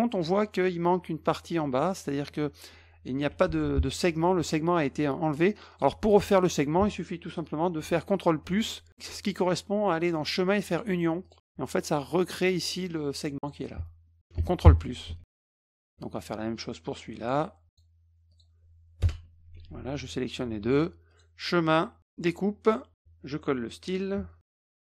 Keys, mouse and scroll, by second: 3.3 F2, 3.7 click, 4.1 middle click, 4.4 middle click, 5.7 click, 6.2 click, 10.7 click, 11.2 click, 13.4 click, 15.1 F1, 15.3 click, 15.8 middle click, 16.1 click, 17.2 click, 17.7 click, 18.3 click, 19.0 Return, 19.6 F1, 20.0 shift+click, 21.1 click, 22.1 click, 24.5 ctrl+shift+v.